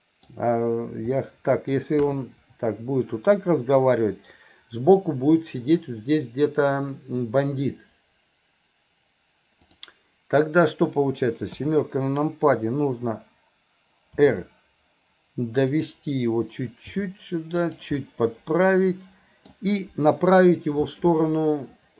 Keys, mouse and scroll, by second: 1.2 middle click, 14.2 r, 17.0 g, 18.0-19.5 middle drag.